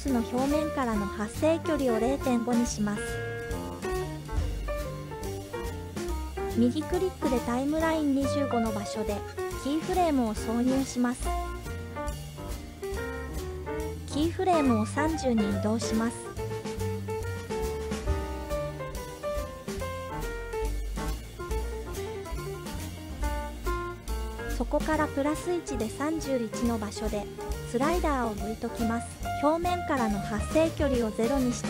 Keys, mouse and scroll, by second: 1.3-5.1 drag, 7.0-8.3 right drag, 12.3 click, 13.2 click, 13.9 click, 16.3 g, 19.5 click, 20.1 click, 24.4 Right, 26.4-28.7 drag, 29.8-30.9 right drag.